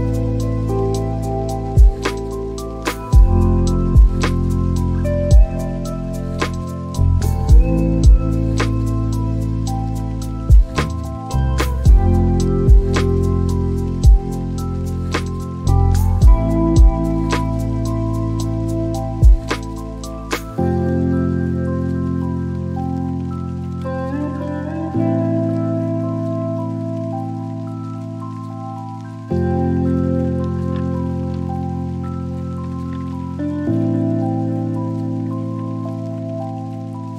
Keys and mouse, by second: 1.2 g, 1.6 y, 7.4 shift+click.